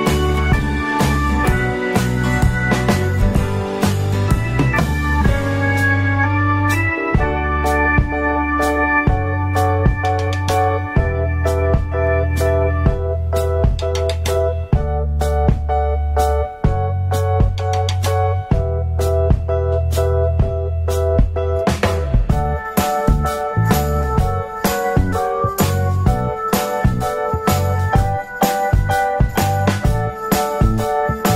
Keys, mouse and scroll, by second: 15.3 alt+middle click, 19.6-21.5 drag, 21.5 alt+middle click, 27.2 click, 28.9 middle click.